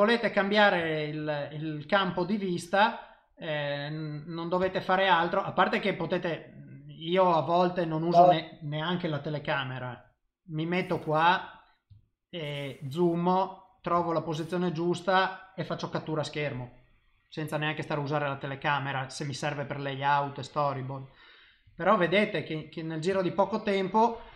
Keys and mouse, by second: 0.8 shift+middle click, 1.3 middle click, 5.2 Tab, 9.4 KP_0, 10.3 middle click, 11.0 shift+middle click, 11.5 click, 11.9 ctrl+middle click, 12.8 middle click, 14.0 shift+middle click, 14.4 middle click, 17.7 middle click, 18.3 middle click, 18.7 middle click, 20.0 middle click, 20.9 middle click, 21.7 shift+middle click, 22.1 middle click, 23.1 shift+middle click.